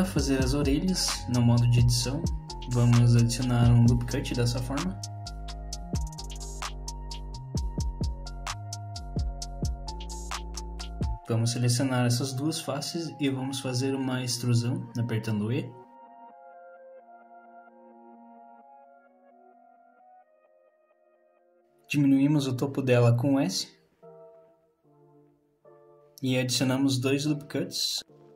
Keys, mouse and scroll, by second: 4.4 KP_3, 5.6 z, 7.2 click, 7.2 middle click, 7.2 scroll down 1, 8.1 middle click, 9.5 middle click, 10.9 3, 11.3 click, 11.7 shift+click, 13.4 KP_1, 15.2 e, 19.4 middle click, 20.6 scroll up 3, 22.4 s, 27.0 ctrl+r.